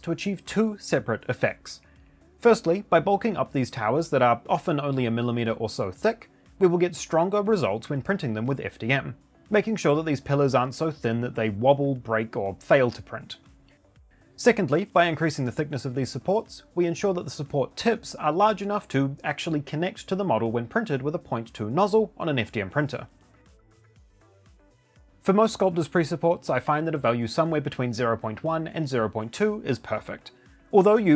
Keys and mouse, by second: 25.0-27.3 drag, 29.5 click.